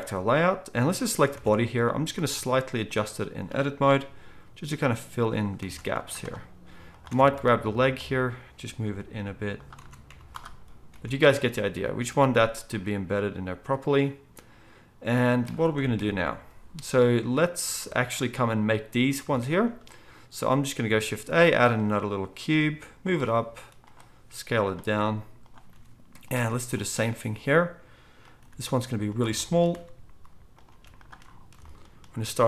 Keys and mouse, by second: 1.3 Tab, 2.1 z, 3.8-5.6 drag, 3.8-5.2 middle drag, 3.8 g, 5.6 Tab, 5.9 z, 7.0 Tab, 7.3 z, 8.8 click, 8.8 g, 9.8 Tab, 10.0 z, 10.9 alt+a, 11.4-13.1 middle drag, 13.1-21.0 right drag, 15.9 KP_1, 20.9 shift+a, 21.0-23.3 middle drag, 22.5-25.7 typing, 23.3-30.8 right drag, 27.9 s, 28.4 g, 29.5-32.4 middle drag, 29.7 r, 30.7 s, 31.4-32.4 shift+right drag, 32.0 s.